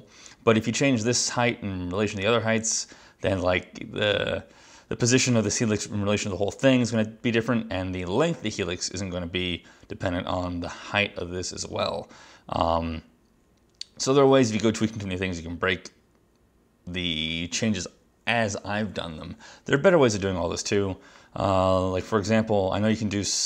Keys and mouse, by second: 22.2 click.